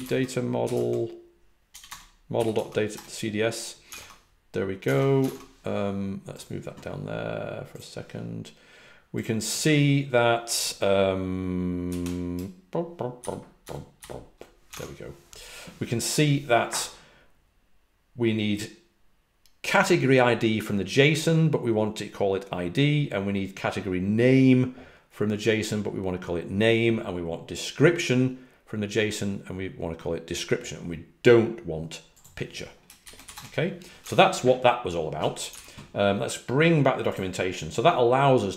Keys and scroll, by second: 0.0-2.9 typing, 3.9 super+Tab, 4.8 super+Tab, 5.2 super+Tab, 13.9 typing, 14.7 super+Tab, 33.3 Return, 35.5 super+w.